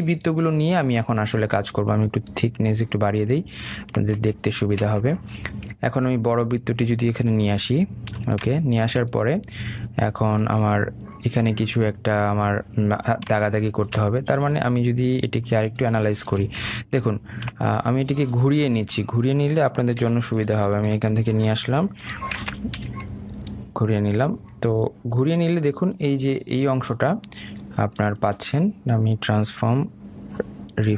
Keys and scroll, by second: 20.7 ctrl+c, 23.1 ctrl+v.